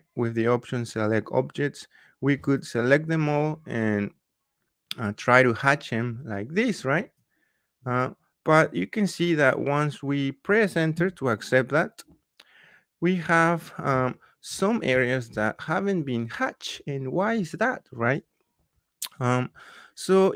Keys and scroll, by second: 10.9 Return.